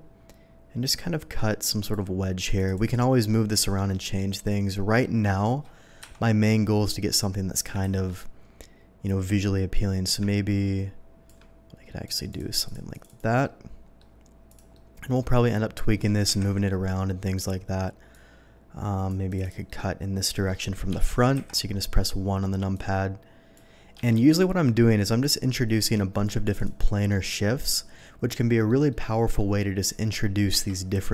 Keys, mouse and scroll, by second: 0.0-1.9 ctrl+drag, 2.4 ctrl+click, 2.6 ctrl+click, 2.8 ctrl+click, 3.3-4.1 ctrl+middle drag, 5.0 middle drag, 6.0 KP_7, 7.8 ctrl+z, 9.7-11.2 ctrl+drag, 12.0 ctrl+click, 12.3 ctrl+click, 12.6 ctrl+click, 12.9 ctrl+click, 13.0 ctrl+click, 13.4-14.0 ctrl+middle drag, 14.5 click, 14.7-15.7 middle drag, 16.4 KP_1, 18.1-19.1 drag, 19.3 click, 19.4 click, 19.6-20.4 middle drag, 20.9 Escape, 21.1 Escape, 21.3 KP_1, 22.7-23.5 drag, 23.9 Escape, 24.1 Escape, 25.2-26.2 drag, 26.4 click, 26.5 click, 26.8 middle drag, 27.6 click, 27.9-28.6 middle drag, 28.9-29.3 middle drag, 30.5 KP_3.